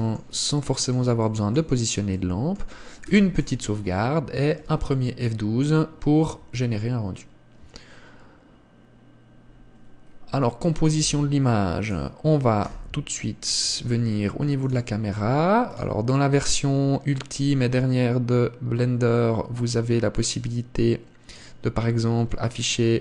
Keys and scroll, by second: 3.4 ctrl+s, 11.4 Escape, 13.2 KP_0.